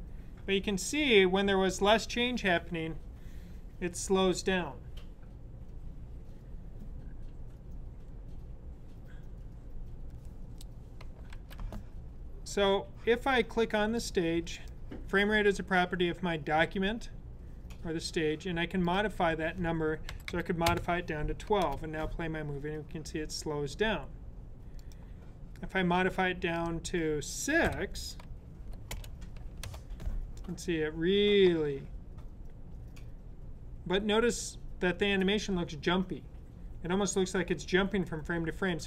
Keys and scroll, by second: 11.2 z, 19.7-20.7 typing, 27.5 6.